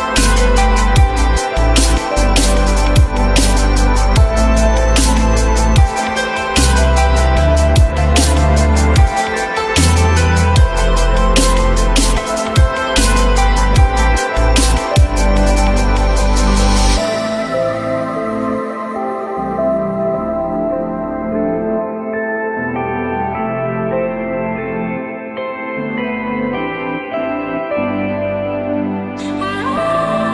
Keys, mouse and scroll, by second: 5.7 shift+click, 18.2-19.1 typing, 22.2 shift+click, 26.5-27.7 typing, 28.0 Return.